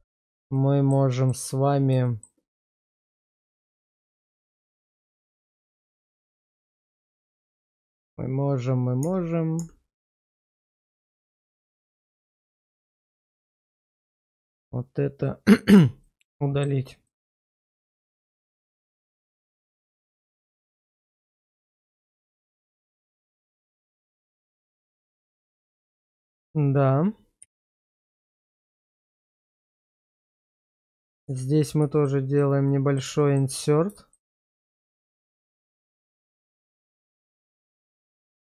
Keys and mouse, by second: 0.5 middle click, 1.1 middle click, 2.0 middle click, 3.1-4.1 middle drag, 4.4 shift+middle click, 5.5 shift+middle click, 9.0 Tab, 9.6 Tab, 9.9 click, 11.0 shift+click, 12.1 middle click, 12.8 shift+middle click, 13.7 x, 15.3 middle click, 16.0 shift+middle click, 17.1-18.9 middle drag, 21.3 middle click, 21.8 shift+middle click, 22.5-23.5 middle drag, 23.7 shift+middle click, 24.2-25.5 middle drag, 25.6 shift+middle click, 26.0 middle click, 27.4 /, 28.8 shift+middle click, 29.3 middle click, 30.1 shift+middle click, 31.2 Tab, 31.5 click, 32.7 middle click, 33.2 shift+middle click, 35.3 i.